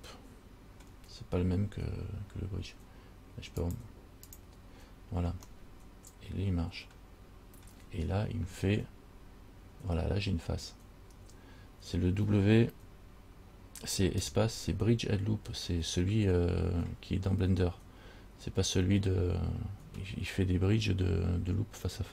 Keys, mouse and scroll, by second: 3.8 click, 4.5 click, 5.8 middle click, 7.0 middle click, 8.3-8.8 scroll up 6, 14.4 space.